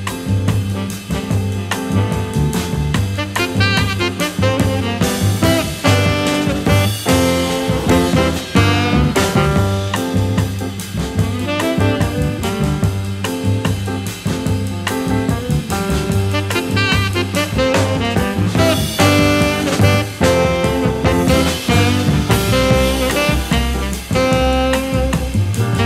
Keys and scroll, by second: 10.7 v, 12.5 a, 13.3 a, 14.5 shift+w, 25.1 v.